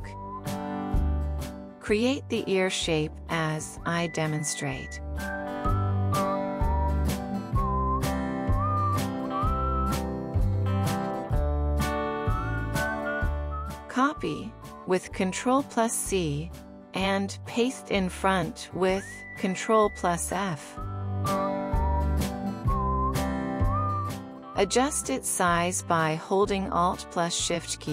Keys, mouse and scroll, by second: 11.2 Escape, 12.6 double click, 15.6 ctrl+c, 19.6 ctrl+f.